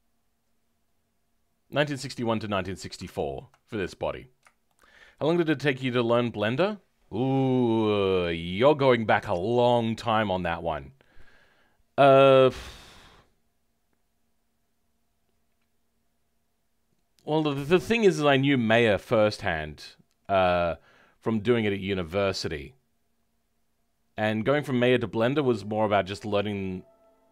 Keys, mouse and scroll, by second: 3.5 middle click.